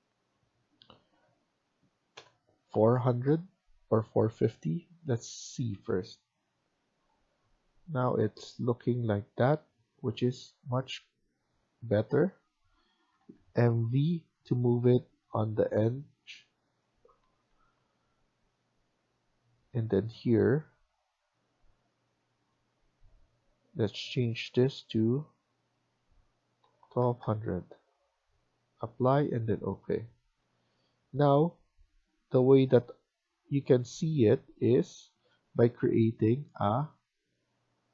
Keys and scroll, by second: 2.0-2.9 typing, 17.1 Escape, 17.1 typing, 17.4 Escape, 17.6 Escape, 26.9-27.6 typing, 30.0 Escape, 30.3 Escape.